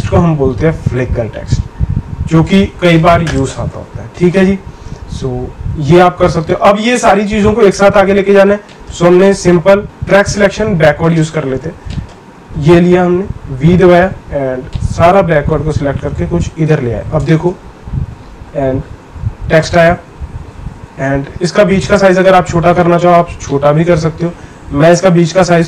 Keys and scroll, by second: 9.8 ctrl+z, 13.5 v.